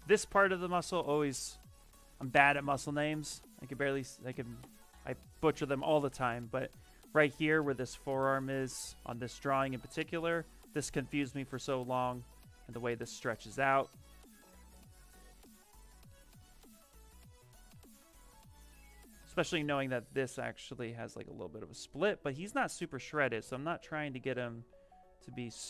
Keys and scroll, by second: 17.2 s, 17.6 s, 18.8-19.7 typing, 23.2 b.